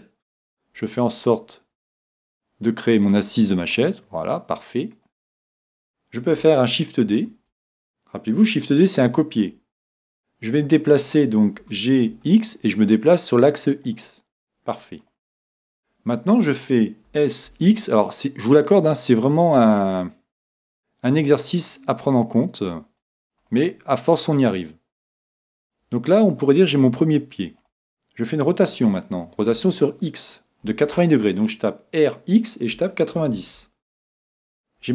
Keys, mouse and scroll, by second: 3.8-5.2 drag, 3.8-5.8 middle drag, 7.1 shift+d, 13.8-15.6 drag, 15.1-16.9 middle drag, 23.1-24.8 drag, 23.5-25.3 middle drag, 25.4-28.3 middle drag, 29.5 r.